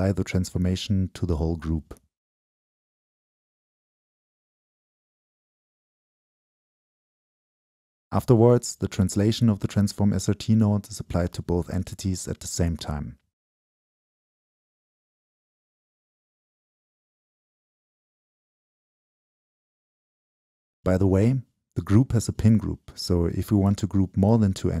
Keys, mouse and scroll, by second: 2.1 Delete, 3.0-5.6 drag, 5.7-10.1 shift+drag, 10.8 click, 11.5-13.8 shift+middle drag, 15.4-17.6 middle drag, 17.4 scroll up 1, 17.6 right click, 17.8-19.3 middle drag, 18.5-19.2 scroll down 2, 19.3-23.1 drag, 23.1-24.8 middle drag.